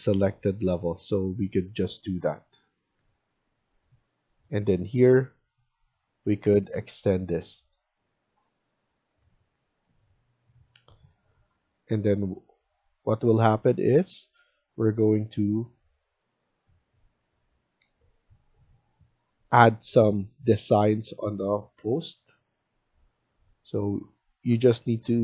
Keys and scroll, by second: 2.9 Escape, 15.2 Escape.